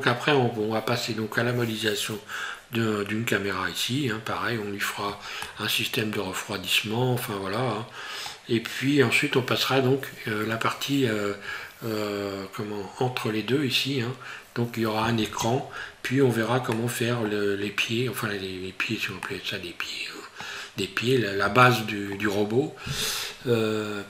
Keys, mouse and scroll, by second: 5.5 middle click, 15.8 scroll down 3, 16.8 middle click, 19.2 middle click, 20.9 scroll up 1, 21.7 shift+middle click, 23.7 scroll up 2.